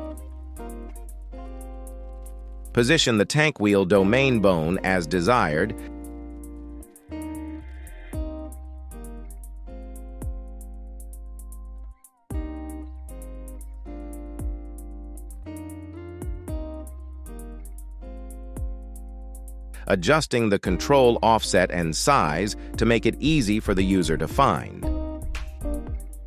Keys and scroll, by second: 0.8 KP_1, 0.9 z, 10.4 ctrl+z, 25.1 KP_3.